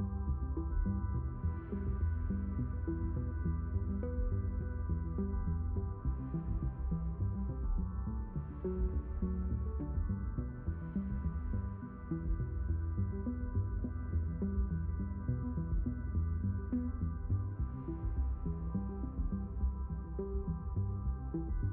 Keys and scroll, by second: 2.8 ctrl+z, 9.5 ctrl+z, 12.2 Escape, 16.5 ctrl+h, 20.6 ctrl+d.